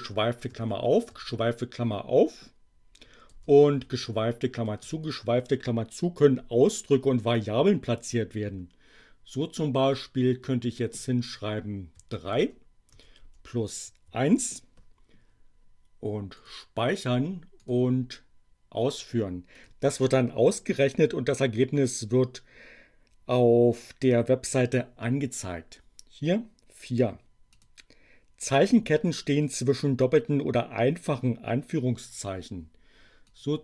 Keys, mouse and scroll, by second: 0.5 alt+7, 3.3 space, 4.0 alt+0, 4.8 alt+0, 9.9 click, 11.8 3, 12.4 space, 13.2 space, 14.0 1, 16.4 click, 17.6 click, 19.5 click, 27.6 click, 33.2-33.6 drag.